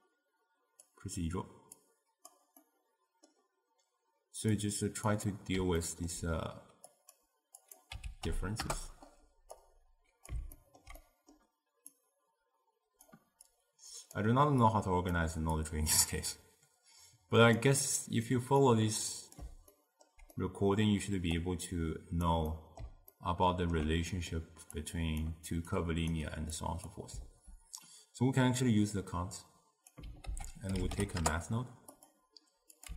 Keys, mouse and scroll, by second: 1.0 click, 1.8 click, 2.7-4.6 middle drag, 4.6 click, 5.4-7.0 middle drag, 7.0 click, 7.7-9.7 drag, 10.6-12.0 ctrl+middle drag, 12.0 click, 13.6 click, 14.8 click, 15.7 click, 18.7 click, 19.8-21.5 ctrl+middle drag, 21.5 click, 22.6-24.8 middle drag, 24.8 click, 25.8 click, 26.6 click, 28.7-30.3 drag, 30.3 ctrl+a, 32.8 click.